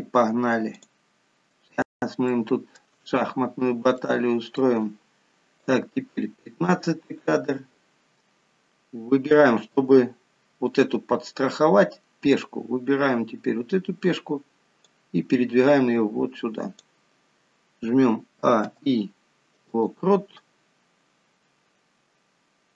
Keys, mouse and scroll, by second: 1.2 click, 2.5 shift+middle click, 3.3-4.3 scroll up 4, 4.2 shift+middle click, 5.9 click, 15.1 click, 18.7 a, 18.9 i, 20.9-21.6 scroll down 4.